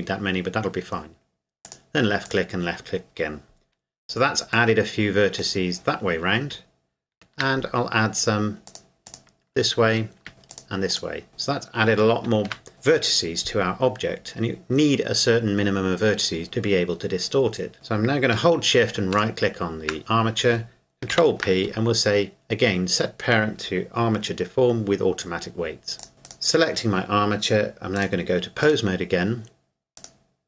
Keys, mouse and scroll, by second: 1.6 click, 4.7 middle click, 7.1 ctrl+r, 8.0-8.7 scroll up 1, 8.7 click, 9.9 ctrl+r, 10.3 scroll up 1, 10.5 click, 12.5 Tab, 19.1 shift+right click, 21.1 ctrl+p, 26.0 click, 26.1 right click, 28.0 click, 30.0 right click.